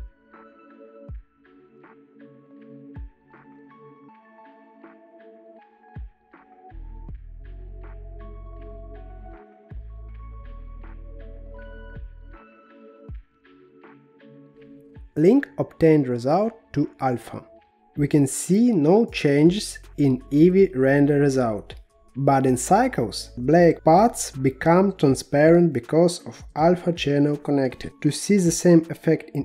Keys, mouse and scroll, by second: 0.8-6.0 drag, 7.0-8.8 drag, 9.5-10.9 middle drag, 11.7-12.3 scroll down 5, 12.3 scroll down 1, 12.4-15.5 middle drag, 15.5-18.0 drag, 19.9 click, 21.1 click, 22.1-26.0 drag, 27.6-29.4 drag.